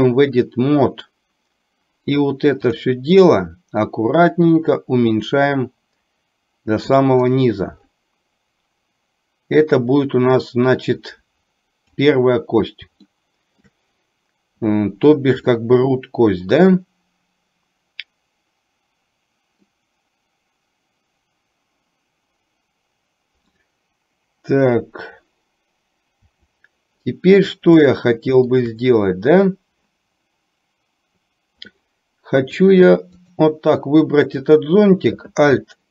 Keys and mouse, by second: 3.9-7.0 drag, 9.8-12.0 drag, 13.1 shift+middle click, 15.6-19.8 middle drag, 26.3 KP_7, 28.0 shift+middle click, 32.8-33.4 drag, 34.4 click.